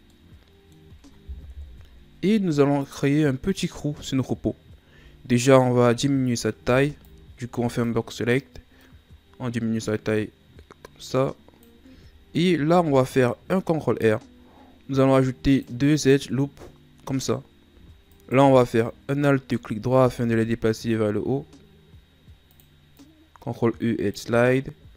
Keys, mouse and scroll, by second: 0.1-1.5 middle drag, 1.5 KP_1, 5.4 right click, 6.6 b, 8.8-11.7 drag, 12.6 ctrl+r, 18.1 alt+right click, 20.0 ctrl+e.